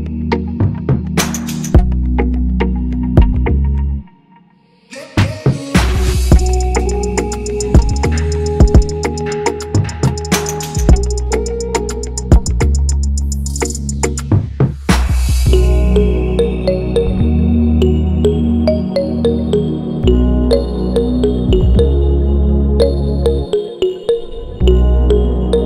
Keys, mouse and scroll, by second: 1.5 Return, 3.0 ctrl+=, 3.1 ctrl+=, 11.7 ctrl+-, 11.8 ctrl+-, 15.0 alt+click, 17.6 shift+click, 18.4 shift+click, 21.5 right click.